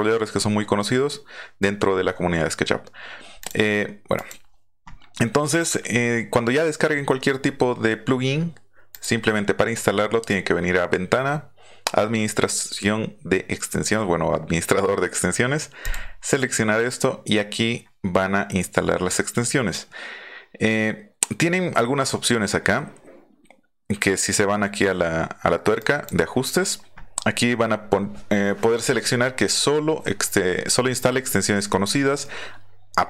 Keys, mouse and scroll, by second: 0.3 scroll up 1, 3.4 click, 4.2 click, 8.9 click, 15.8 click, 25.8 click.